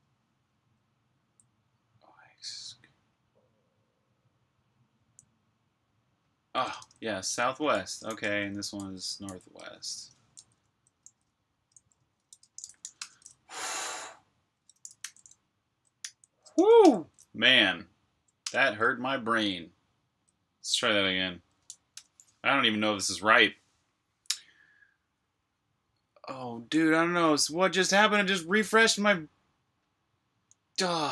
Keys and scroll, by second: 0.7-1.1 typing, 3.4 typing, 4.8 j, 6.7-13.2 typing, 14.5-16.7 typing, 21.9-24.0 typing.